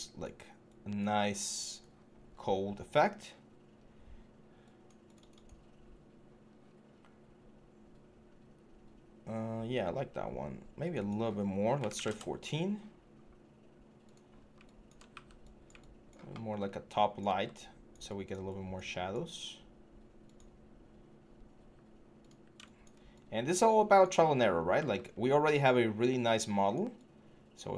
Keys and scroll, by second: 11.7 typing, 14.9 w, 17.0 e, 21.3 w, 24.7 e.